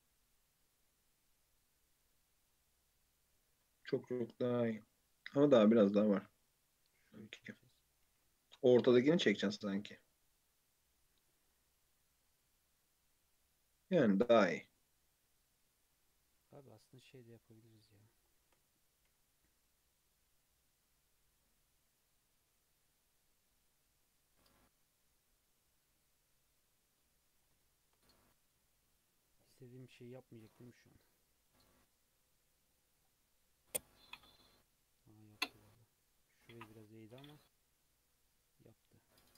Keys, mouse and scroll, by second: 2.1 Tab, 2.5-3.5 middle drag, 3.5 Tab, 4.0 g, 5.8 alt+z, 6.1-7.0 middle drag, 7.0 click, 7.4 alt+z, 7.7-8.1 middle drag, 8.1 g, 10.8-12.0 middle drag, 12.0 Tab, 12.3 Tab, 12.4-14.4 middle drag, 14.4 Tab, 15.1 scroll down 1, 15.4 Tab, 15.8 alt+z, 16.1-16.6 middle drag, 16.6 3, 17.3-18.9 middle drag, 18.9 c, 28.7-29.5 shift+middle drag, 29.5 shift+click, 30.3 shift+click, 30.8 alt+z, 31.2-31.6 middle drag, 31.6-33.5 right drag, 33.5-35.7 middle drag, 35.7 scroll down 2, 36.1 click, 36.5-39.0 middle drag, 39.0 Tab.